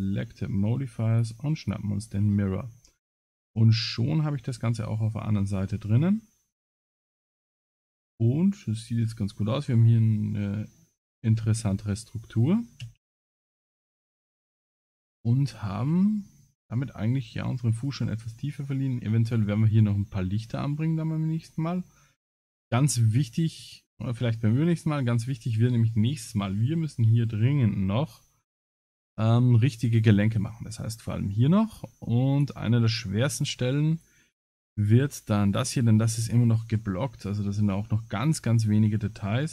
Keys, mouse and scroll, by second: 2.3-2.8 scroll down 8, 2.7 middle click, 3.5 a, 3.8 middle click, 4.8 middle click, 5.6-6.1 scroll up 4, 6.4 middle click, 7.3 ctrl+s, 7.7 middle click, 12.8 ctrl+s, 14.1 scroll down 4, 14.6 click, 14.6 scroll down 2, 15.0 middle click, 16.2 middle click, 20.9 scroll down 1, 21.5 scroll up 2, 22.1 middle click, 22.1 scroll up 1, 24.7 shift+middle click, 32.3 click, 32.9 click, 34.2 click, 34.8 click, 36.1 click.